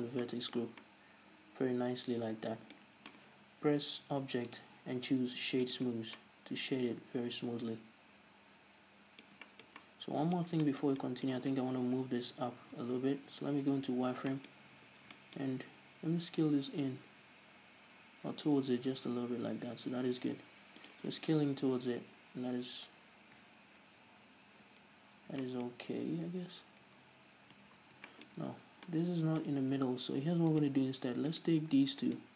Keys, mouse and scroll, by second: 0.1 click, 0.6-4.9 middle drag, 1.1 Tab, 4.9-6.5 drag, 6.5-11.0 middle drag, 12.4 KP_3, 13.6 z, 14.7 shift+middle click, 15.2 Tab, 15.5 shift+middle click, 15.9-16.5 scroll up 1, 16.5 s, 21.3 shift+click, 23.5 ctrl+z, 24.3 ctrl+shift+z, 24.8 ctrl+z, 25.8-30.9 shift+middle drag, 26.3-26.7 scroll up 2, 26.7 ctrl+z, 27.3 ctrl+shift+z, 28.1 ctrl+z, 28.7-29.3 scroll up 2, 29.8-30.2 scroll up 1, 30.9-31.8 right drag.